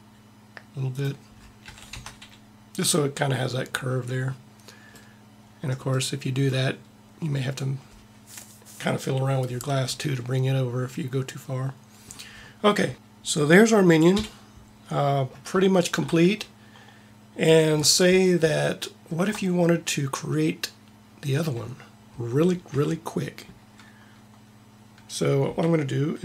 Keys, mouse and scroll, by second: 1.6 a, 1.9 Tab, 14.0 KP_1, 22.8 a.